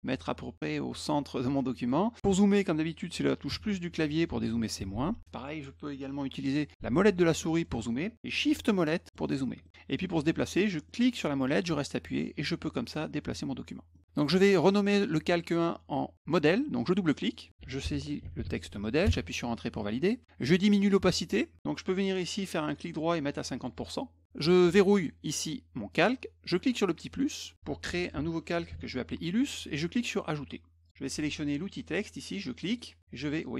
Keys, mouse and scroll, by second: 7.2 middle click, 7.2-7.7 scroll up 2, 7.6 middle click, 8.6 shift+middle click, 8.6 shift+scroll up 1, 9.1 shift+middle click, 9.6 middle click, 10.9-13.9 middle drag, 17.1 click, 17.3 click, 17.4-18.7 typing, 19.1 Return, 22.7 right click, 23.6 click, 25.9 click, 27.1 click, 27.6-29.2 typing, 30.8 click, 31.8 click, 32.7 click.